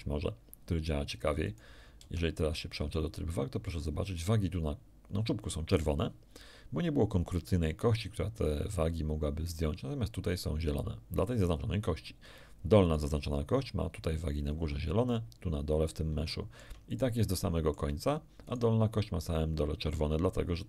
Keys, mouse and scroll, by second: 1.4 right click, 2.0 ctrl+Tab, 3.8 scroll up 2, 12.8 right click, 16.2 shift+middle click, 16.8 shift+right click, 17.3 shift+middle click, 18.4 shift+right click.